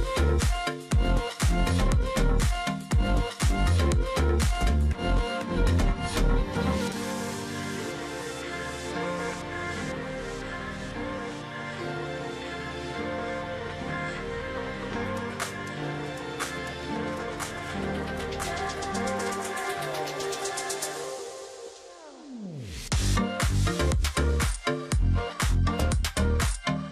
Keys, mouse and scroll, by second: 0.7 ctrl+z, 2.6 space, 5.1 ctrl+click, 5.2 space, 6.6 ctrl+click, 8.1 ctrl+click, 9.6 ctrl+click, 11.0 shift+click, 11.9 alt+click, 12.2 ctrl+click, 12.5 alt+scroll down 1, 12.7 space, 13.0 alt+scroll down 1, 14.5 alt+scroll up 1, 15.8 alt+scroll up 1, 16.1 space, 16.6 ctrl+click, 17.2 alt+scroll up 1, 17.8 space, 18.4 alt+scroll down 1, 18.5 space, 20.5 double click, 21.0 ctrl+click, 22.1 shift+click, 22.9 alt+click, 23.1 ctrl+click, 23.3 alt+scroll down 1, 23.6-24.0 alt+scroll, 24.0 alt+scroll up 1, 24.7 ctrl+click, 25.1 alt+scroll up 1, 25.3 ctrl+click, 25.6 z.